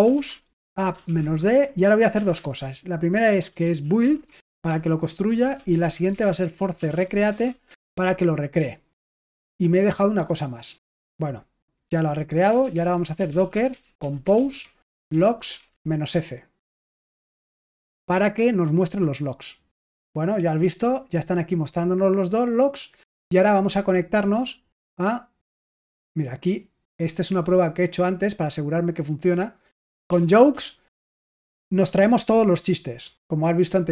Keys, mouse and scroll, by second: 0.0-8.3 typing, 12.2-16.3 typing, 17.8 Return, 24.8 click, 28.0-29.3 drag, 29.6 BackSpace, 29.8 BackSpace, 30.0 BackSpace, 30.2 BackSpace, 30.4 Return.